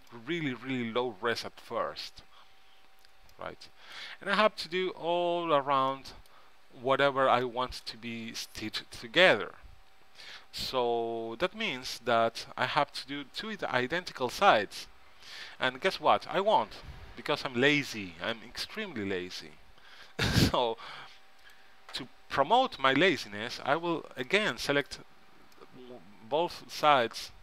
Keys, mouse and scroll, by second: 3.5-5.4 middle drag, 6.1-11.5 middle drag, 11.5 z, 13.0 z, 13.8 KP_3, 15.3 z, 16.3 middle click, 17.5 b, 19.2 b, 22.8 z, 24.4 middle click, 26.4-27.4 middle drag.